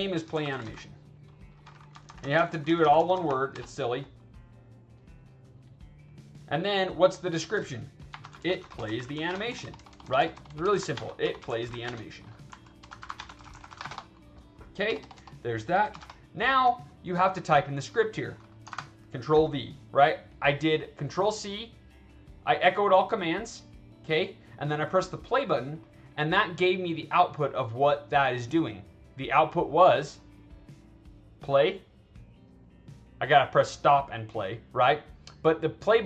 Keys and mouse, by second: 0.0-0.8 typing, 6.0 click, 6.3 click, 6.7 click, 8.0-14.0 typing, 18.6 ctrl+v, 20.6 click, 22.9 click, 29.9 click, 31.1 click, 31.9 click.